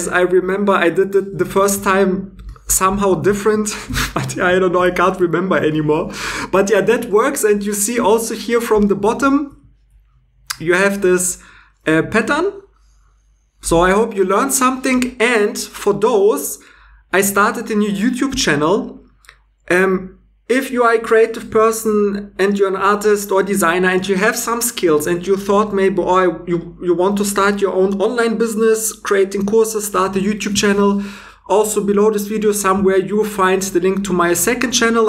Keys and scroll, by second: 1.8 super+Tab, 3.0 shift+e.